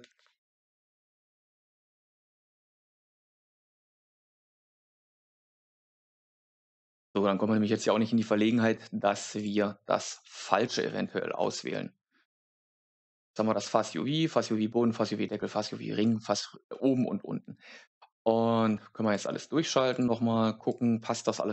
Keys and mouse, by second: 0.1 Left, 2.8-4.5 drag, 4.5 shift+click, 5.7 click, 9.3 click, 11.3 Tab, 16.6 middle click, 19.0 click, 19.8 click, 20.6 click.